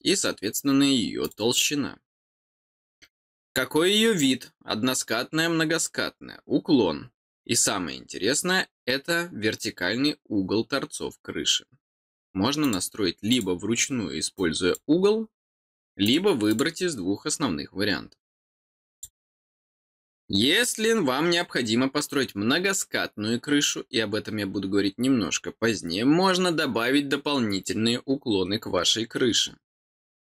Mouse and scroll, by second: 1.2 click, 12.6 click, 13.2 click, 14.3 click, 16.0 click, 16.4 click, 18.9 click.